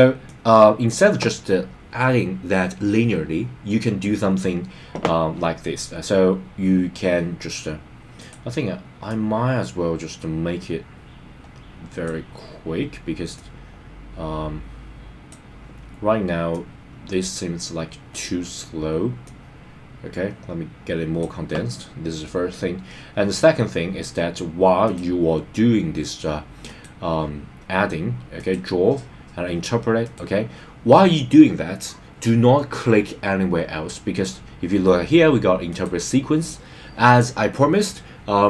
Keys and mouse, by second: 0.2 click, 8.2 click, 9.0 click, 9.3 click, 13.3 click, 13.6 click, 16.5 click, 16.7 click, 19.2 click, 19.4 click, 22.5 click, 24.9-26.8 drag, 28.3-30.1 drag, 35.7 click.